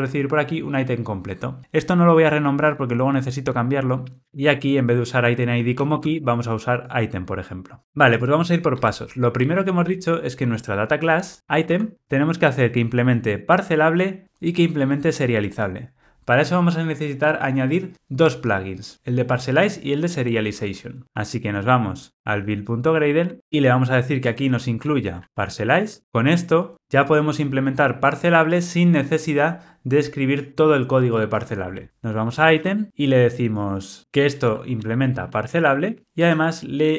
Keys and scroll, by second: 4.2 super+z, 26.0 super+BackSpace, 36.0 Return.